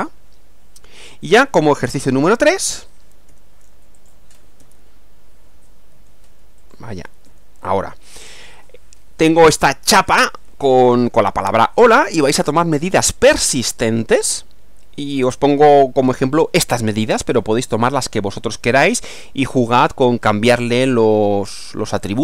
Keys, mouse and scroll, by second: 1.3 click, 2.3 Right, 3.3 Page_Down, 4.0 click, 4.6 Page_Down, 5.9 Page_Down, 6.6 click, 7.3 Page_Down.